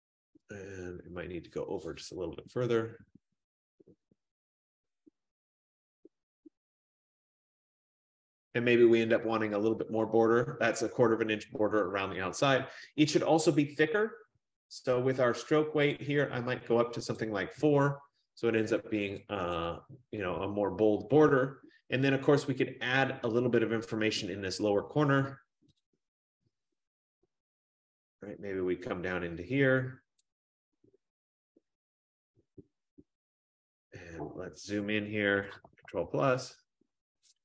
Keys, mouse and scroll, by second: 2.3 Left, 2.5 Left, 2.7 Left, 3.0 Left, 3.1 Left, 3.2 Left, 3.3 Left, 3.5 Left, 4.3 Up, 4.9 Up, 5.7 Left, 5.7 Up, 5.8 Left, 7.3 Up, 7.7 Right, 8.0 Down, 16.1-17.3 drag, 19.3 click, 19.8 click, 22.2 scroll, 25.8 click, 30.5 click, 33.6 click, 35.7 ctrl+=, 36.2 ctrl+=, 36.5 ctrl+=.